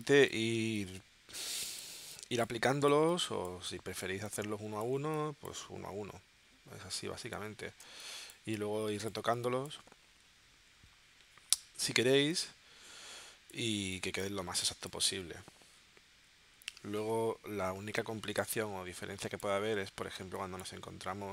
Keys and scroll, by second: 7.8 space, 12.2 space, 18.4 space, 20.2 space.